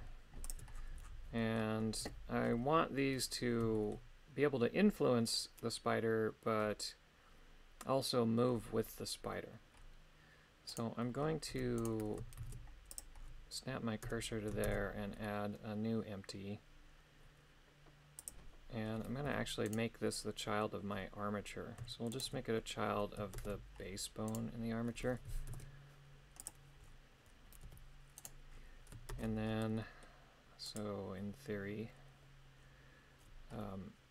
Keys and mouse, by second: 0.5 ctrl+click, 1.4 middle click, 2.0 KP_3, 3.8 shift+middle click, 10.7 right click, 11.5 Tab, 11.8 right click, 12.4 shift+s, 14.1 Tab, 14.6 shift+a, 19.2 g, 20.1 middle click, 22.1 shift+right click, 23.4 ctrl+Tab, 24.3 right click, 25.5 ctrl+p, 27.6 g, 29.1 ctrl+Tab, 29.7 middle click, 30.7 right click.